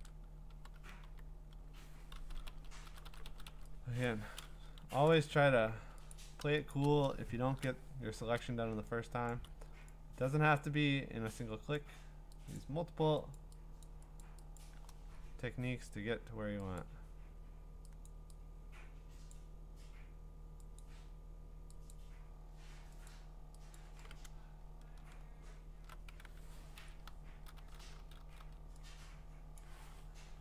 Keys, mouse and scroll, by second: 0.5-3.4 typing, 4.0 click, 4.8 ctrl+z, 5.3 right click, 6.1 click, 6.4 ), 9.3 click, 9.7 x, 11.7 click, 12.6 click, 13.3 click, 13.8 click, 14.2 click, 14.6 click, 16.8 click, 18.1 click, 23.7 click, 24.3-24.7 scroll, 25.3-25.9 scroll, 26.8-28.4 typing, 29.6 click, 30.3 ctrl+z.